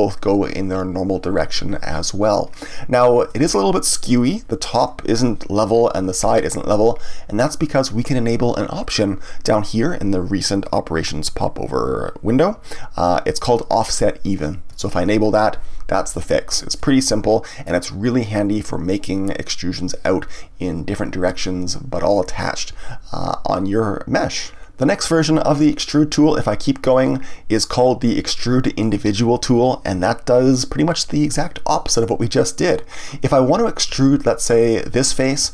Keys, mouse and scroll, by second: 3.2-6.3 middle drag, 14.7 click, 16.7-19.8 middle drag, 27.0-30.0 drag, 34.5 click.